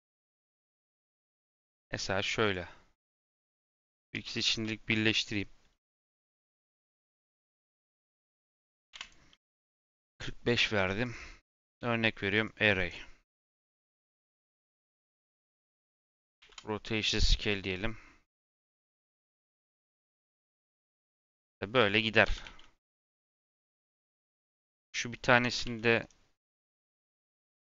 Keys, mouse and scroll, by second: 0.6 click, 2.4 click, 3.7 shift+click, 4.4 ctrl+j, 6.1 click, 7.2-8.8 right drag, 8.8 KP_4, 8.9-11.0 drag, 11.5-12.9 drag, 12.9 scroll down 3, 16.3 ctrl+a, 19.9-22.2 drag, 22.2 g, 23.3 shift+middle click, 23.6 scroll up 1, 24.5 Tab, 24.7 3, 25.2 Tab, 25.6 shift+d.